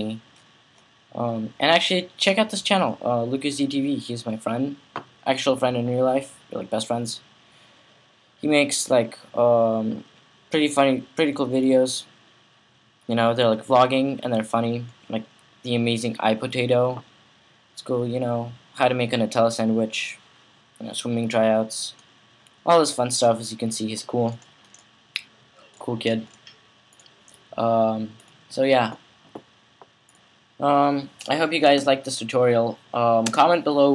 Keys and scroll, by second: 33.1 space.